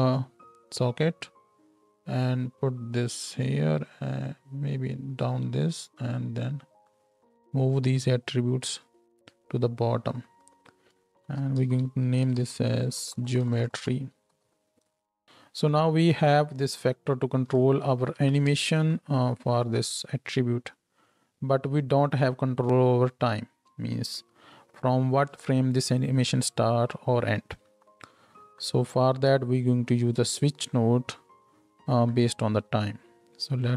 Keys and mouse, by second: 4.0-5.1 drag, 5.1-6.2 middle drag, 6.2-7.0 drag, 7.0-8.0 middle drag, 8.0-8.7 drag, 8.7-10.4 middle drag, 10.4 click, 10.5-13.8 middle drag, 13.2-13.8 typing, 15.2 n, 18.1 shift+Left, 18.5 space, 23.7 space.